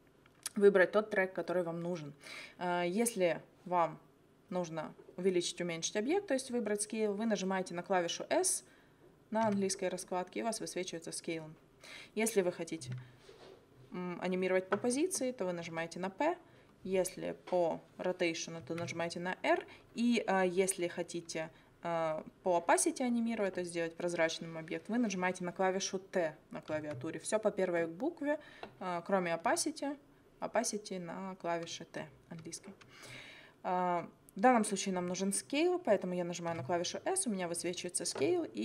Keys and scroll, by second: 9.5 s, 15.6 p, 18.6 r, 26.8 t, 36.5 s.